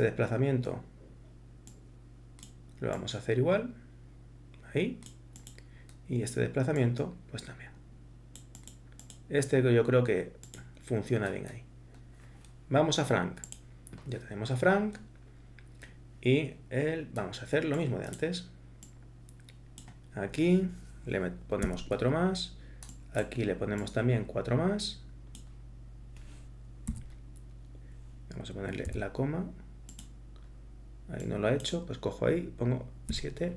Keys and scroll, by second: 21.6 8, 26.9 7, 28.9 ,, 33.1 7.